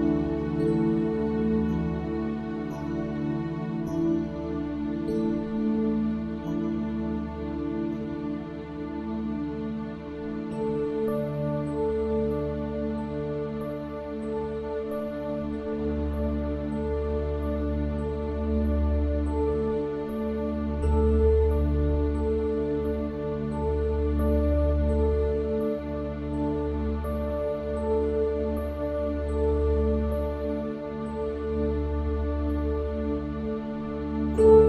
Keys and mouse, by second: 14.5-14.9 drag, 17.0 click.